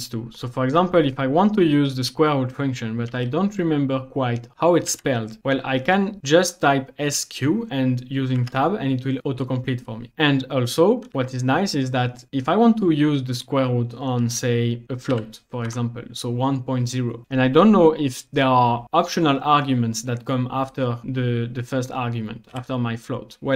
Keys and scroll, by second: 3.1 s, 4.9 q, 8.4 Tab, 11.1 typing, 14.6-15.7 typing, 22.6 ,.